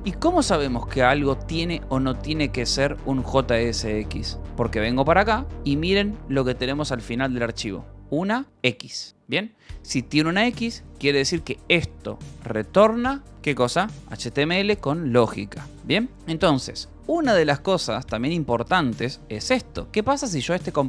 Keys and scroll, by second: 4.9-9.5 typing, 17.0-19.7 typing, 20.7 Return.